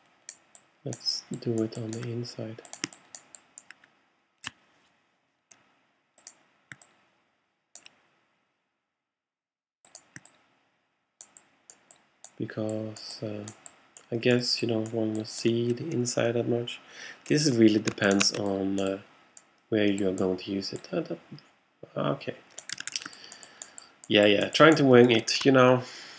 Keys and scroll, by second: 22.9 alt+super+z.